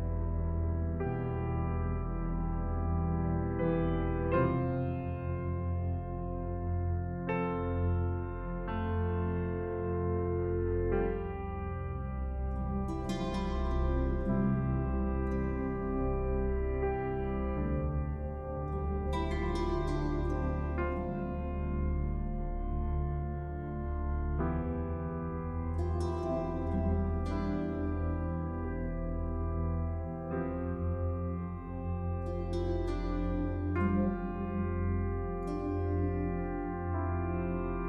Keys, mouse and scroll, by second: 29.0-29.5 scroll up 1, 29.5-29.9 scroll down 1, 30.2 scroll up 1, 31.0-31.7 scroll down 1, 32.3-33.4 scroll up 1, 33.4 click.